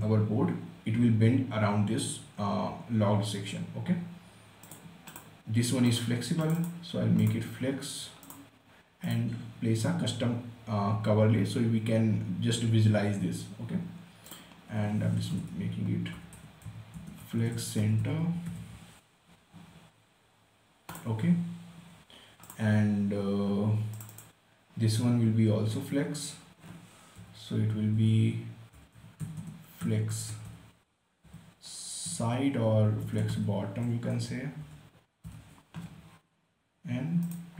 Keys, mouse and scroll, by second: 5.0 click, 9.5 click, 14.6 click, 15.7-19.6 typing, 21.3 click, 28.3-31.6 typing, 33.4-35.6 typing.